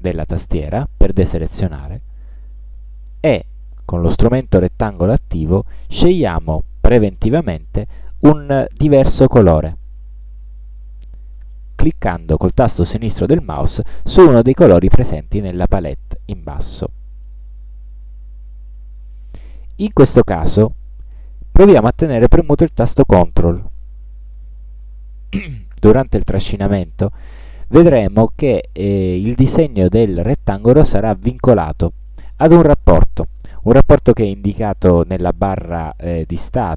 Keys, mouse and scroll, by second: 3.2 click, 10.5 click, 17.7-36.7 drag.